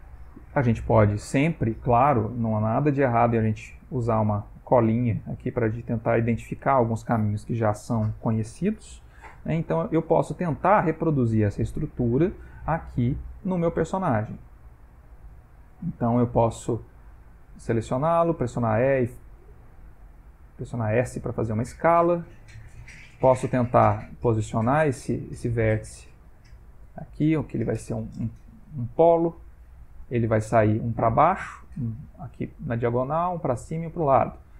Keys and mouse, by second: 0.2 ctrl+middle click, 14.0 middle click, 16.5 click, 16.8 click, 17.3 a, 18.3 e, 21.0 s, 25.2 click, 25.5 g.